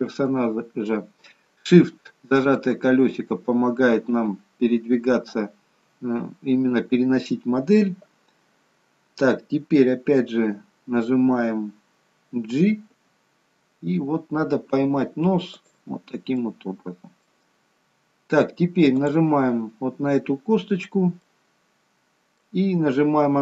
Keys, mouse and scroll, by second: 1.8 shift+middle click, 2.9-4.8 scroll up 2, 4.8 scroll up 2, 16.3 middle click, 17.4-19.1 scroll down 3, 19.1 click, 20.7-21.2 scroll down 2, 21.2 middle click.